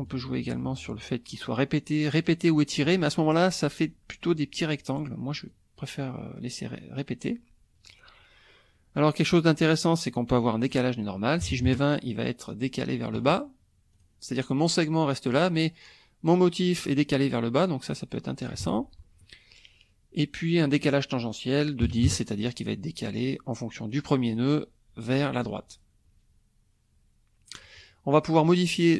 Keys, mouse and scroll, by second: 0.1-2.2 drag, 5.5-6.8 drag, 10.4 click, 11.4 KP_2, 11.5 KP_0, 11.7 KP_Enter, 13.9 click, 17.6-18.6 drag, 18.6 ctrl+z, 20.5 click, 21.8 KP_1, 21.9 KP_0, 22.0 KP_Enter, 24.3 click.